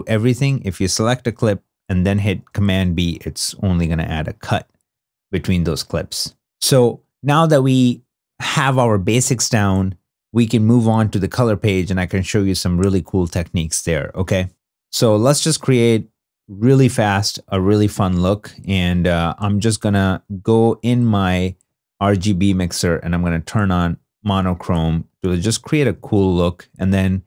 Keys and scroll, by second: 2.2 super+b, 4.8 super+z, 25.9 alt+s.